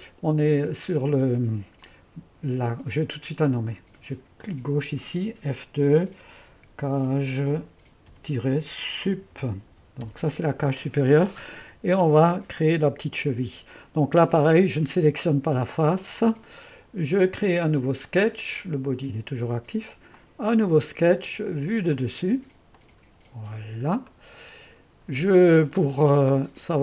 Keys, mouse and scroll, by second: 1.9-5.7 drag, 5.7 F2, 6.3-10.2 typing, 14.4-17.0 drag, 20.2-21.3 drag, 22.0-24.1 drag, 24.1 middle click.